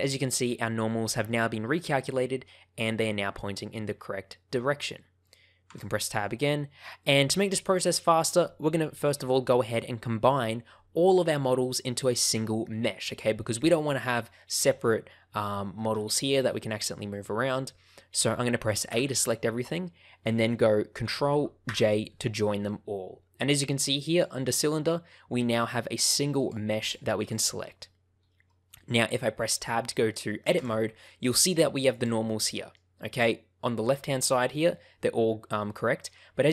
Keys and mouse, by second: 0.4 middle click, 2.0 middle click, 3.8-5.2 middle drag, 5.6 Tab, 6.9 middle click, 8.1 shift+middle click, 14.4 click, 15.8 g, 16.4-18.8 drag, 18.8 a, 21.6 ctrl+j, 24.0 click, 24.6 click, 27.1 click, 30.5 Tab, 31.0 middle click, 31.8 click, 32.2 middle click, 34.5 middle click, 36.0 middle click.